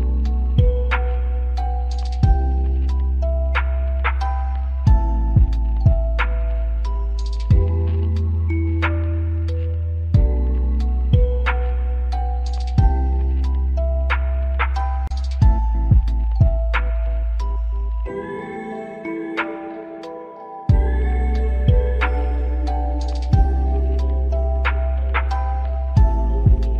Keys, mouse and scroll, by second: 0.1 double click, 0.5 alt+click, 1.2 alt+middle click, 1.7-2.0 scroll up 1, 2.1 middle click, 3.6 ctrl+click, 6.7 double click, 7.0-7.4 scroll up 1, 7.5 alt+middle click, 7.9 alt+right click, 16.3 middle click, 17.0 alt+click, 17.5 alt+right click, 19.4 scroll up 1, 24.2 double click, 26.1 scroll up 1, 26.4 alt+click.